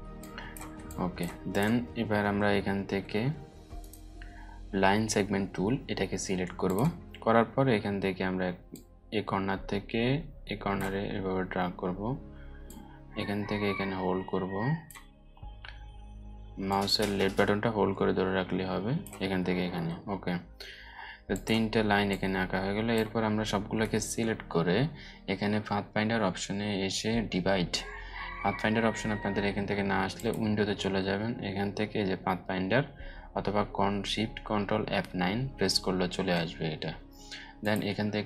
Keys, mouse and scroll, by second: 0.2 space, 0.4-1.0 drag, 2.2-2.7 alt+scroll up 2, 3.3 right click, 6.2-10.5 drag, 9.8 click, 10.0 click, 29.7 click, 37.1 click.